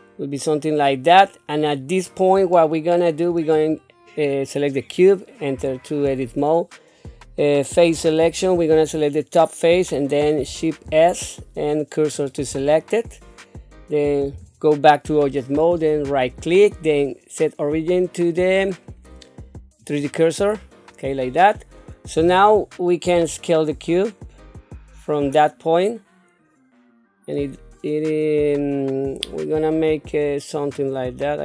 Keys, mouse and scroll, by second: 1.1 scroll down 2, 1.5 scroll up 3, 2.5 shift+middle click, 3.5 click, 5.6 Tab, 7.9 3, 8.6 click, 10.8 shift+s, 14.3 Tab, 16.1 right click, 23.1 s, 31.0-31.4 scroll down 3.